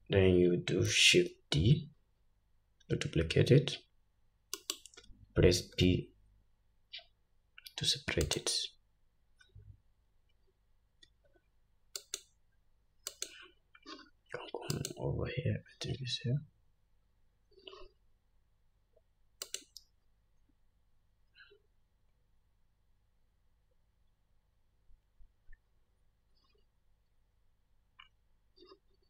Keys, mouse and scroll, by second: 1.1 shift+d, 11.2 Tab, 12.1 click, 13.3 click, 14.9 click, 19.6 click.